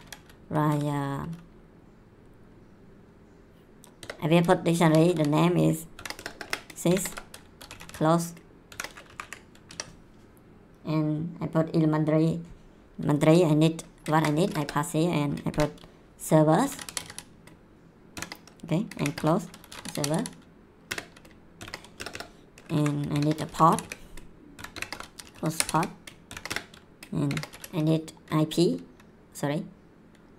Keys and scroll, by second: 0.7 s, 4.0-8.7 typing, 6.1 Return, 9.1 Up, 9.6 Tab, 14.1 ctrl+v, 14.4 Return, 15.5-21.6 typing, 20.9 Return, 21.9 Return, 22.7 Up, 22.9-27.3 typing, 26.5 Return.